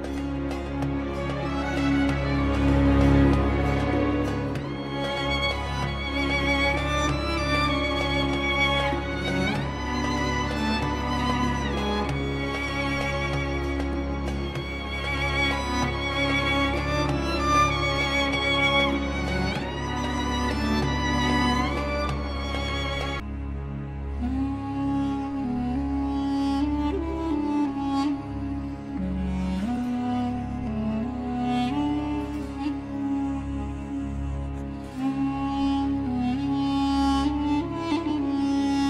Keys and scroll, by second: 4.1 shift+F2, 7.8 alt+c, 8.7 F3, 13.9 Escape, 17.6 Escape, 22.6 0, 22.7 Return, 23.7 Escape, 26.6 shift+Page_Up, 29.6 shift+Page_Up, 30.4 Escape, 31.0 F4.